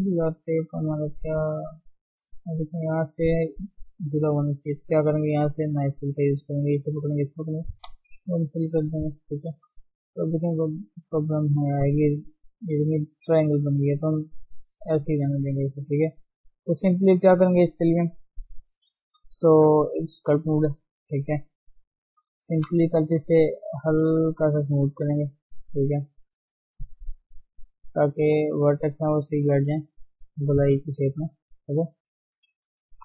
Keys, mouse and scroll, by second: 1.4 click, 2.4 middle click, 3.1 scroll up 2, 3.4-4.9 middle drag, 4.9 click, 8.4 middle click, 9.1 Tab, 9.3 middle click, 10.1 Tab, 10.3-13.7 middle drag, 13.7 ctrl+z, 14.0 ctrl+z, 14.3 ctrl+z, 14.6 ctrl+z, 15.1 scroll down 3, 15.4-16.5 middle drag, 16.5 click, 16.8-18.5 shift+middle drag, 18.5 KP_3, 19.1-19.6 scroll down 1, 19.6 shift+middle click, 20.2 ctrl+Tab, 22.6 shift+s, 22.8 f, 23.5-24.1 scroll up 1, 24.1-25.1 drag, 25.1 middle click, 25.5-27.9 drag, 27.9 middle click, 28.8 scroll up 1, 29.1 middle click, 29.4 scroll up 1, 29.5-31.1 drag, 31.1 middle click, 31.7 click, 32.5-32.9 scroll down 2, 32.9 KP_3.